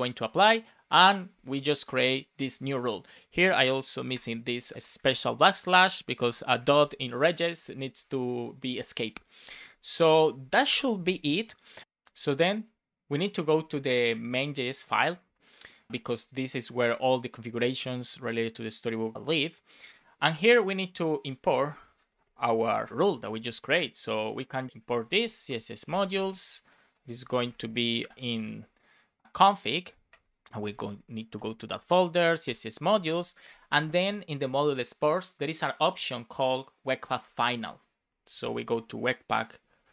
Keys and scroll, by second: 4.9 shift+Right, 5.7 Right, 6.5 shift+Left, 7.5 Right, 7.8 Left, 21.8 super+Left, 22.0 Return, 22.4 Up, 23.2 Down, 24.7 Return, 24.7 space, 25.5 shift+m, 26.2 space, 27.6 shift+9, 28.0 shift+1, 28.1 space, 30.0 BackSpace, 31.3 Return, 32.4 Return, 32.9 super+s, 38.0 Return.